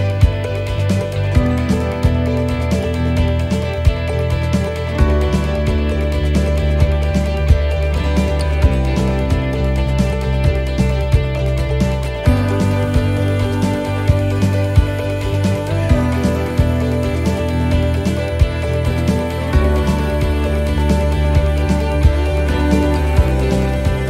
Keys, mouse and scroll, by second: 0.8 middle click, 1.7-2.4 scroll up 1, 3.1 click, 3.1 scroll up 1, 4.4 right click, 6.1 click, 7.5 right click, 8.6 l, 9.8 middle click, 9.8 l, 11.6 x, 12.9 middle click, 13.4 scroll down 1, 13.8 middle click, 14.8 shift+middle click, 15.7 scroll down 1, 16.2 scroll up 1, 16.7 middle click, 17.1 shift+middle click, 19.5 click, 21.0 right click, 22.1 x, 23.2 middle click.